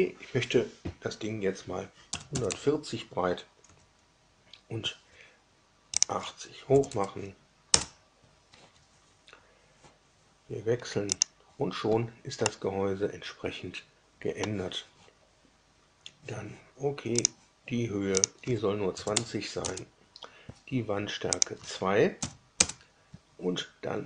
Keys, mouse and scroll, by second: 2.1 KP_1, 2.3 KP_4, 2.4 KP_0, 3.6 Tab, 5.9 click, 6.7 KP_8, 6.8 KP_0, 7.6 KP_Enter, 11.1 click, 12.4-14.5 middle drag, 17.2 click, 18.1 click, 18.8 KP_2, 19.1 KP_0, 19.6 KP_Enter, 20.2 KP_2, 21.3 click, 22.1 KP_2, 22.5 KP_Enter.